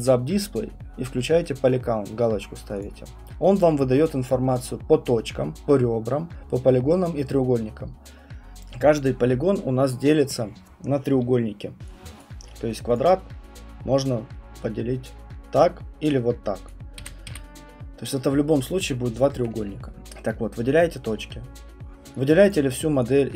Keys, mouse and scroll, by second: 2.8 click, 11.1 Print, 12.2 click, 12.9 click, 15.1 click, 16.7 click, 17.0 Escape, 17.3 Escape, 20.3 right click, 22.5 click.